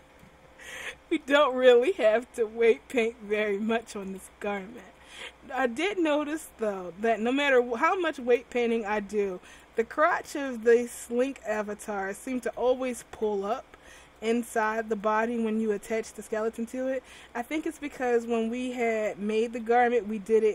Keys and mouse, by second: 2.0 r, 4.2 a, 4.4 a, 4.9 alt+r, 8.9 r, 9.8 a, 10.0 a, 10.5 alt+r, 12.5 r, 13.4 a, 14.4 ctrl+z, 15.1 ctrl+z, 19.7 r.